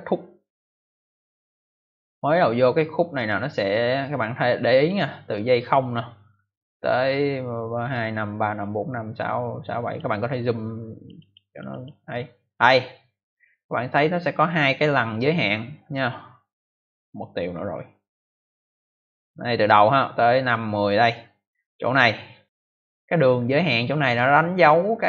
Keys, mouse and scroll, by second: 6.2 click, 10.8 click, 11.1 click, 11.2 double click, 11.4 double click, 11.6 double click, 11.8 double click, 14.3 click, 15.5 click.